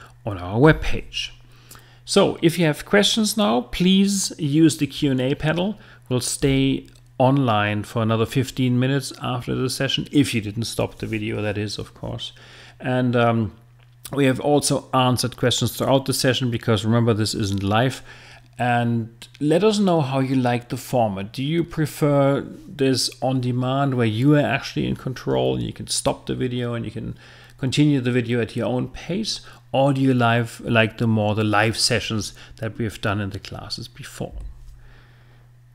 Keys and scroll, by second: 0.7 Right, 34.3 Right.